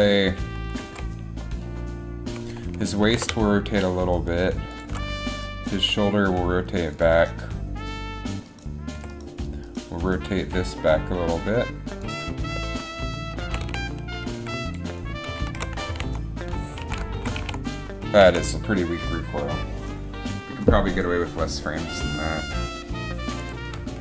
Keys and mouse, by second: 1.0 KP_7, 3.2 r, 5.9 r, 6.6 r, 9.1 r, 10.2 r, 10.3 r, 13.6 a, 13.8 a, 14.5 i, 15.7 shift+Left, 16.0 alt+a, 17.0 alt+a, 17.3 shift+Left, 17.5 alt+a, 18.4 alt+a, 23.5 click.